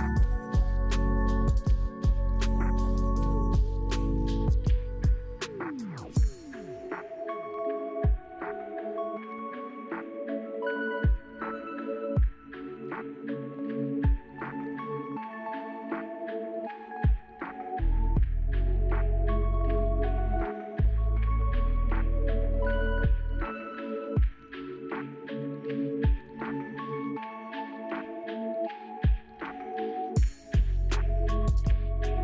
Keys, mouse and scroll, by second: 0.7 scroll down 1, 1.3-1.8 scroll down 1, 7.2-7.8 scroll up 4, 8.3 scroll up 2, 14.9 scroll up 7, 15.7-16.4 scroll up 1, 16.4-17.8 scroll down 2.